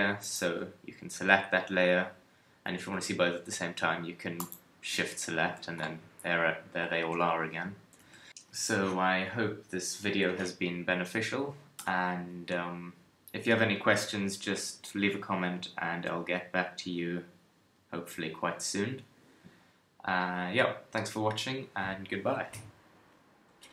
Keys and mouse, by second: 5.4 a, 7.0 KP_1, 8.0 Tab, 11.8 KP_3.